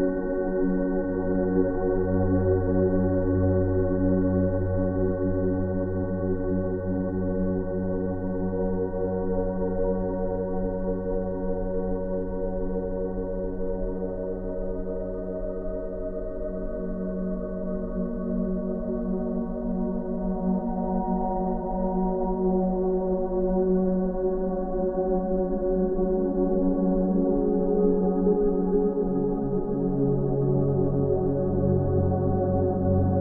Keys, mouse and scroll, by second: 7.6-8.5 scroll down 1, 8.9-9.6 click, 10.6 scroll up 1, 11.8-12.4 drag, 14.9-15.3 scroll down 2, 15.6-16.6 scroll down 1, 16.6-17.9 drag, 22.3 scroll down 1, 25.1-26.0 scroll down 2, 26.0 space, 26.7-28.4 drag, 28.3 space, 29.9 ctrl+alt+z, 31.0 click, 31.2 space, 31.3 right click, 31.6 click, 32.5 ctrl+space.